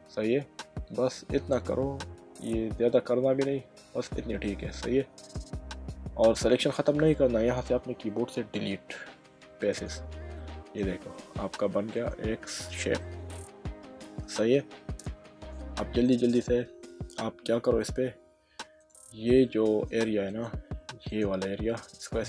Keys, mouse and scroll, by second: 4.1 click, 4.7 middle click, 8.4 Delete, 9.7 click, 10.4 middle click, 11.1 Tab, 11.9 click, 13.0 middle click, 17.2 Tab, 18.8 click, 19.4 middle click, 20.3 click, 21.1 alt+click.